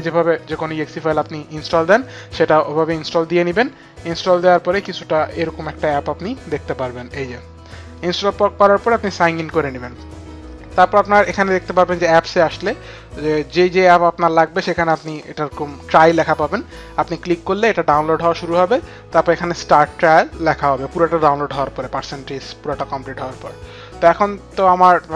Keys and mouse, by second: 0.5 click, 1.1 click, 5.8 click, 7.1 click, 8.6 click, 10.5 click, 23.4 click.